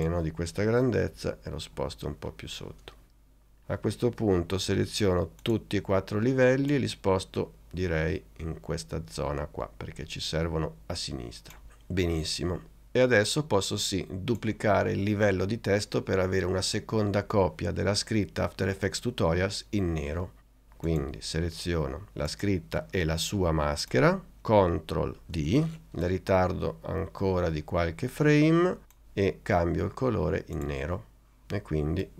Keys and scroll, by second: 1.2 Down, 25.5 super+d.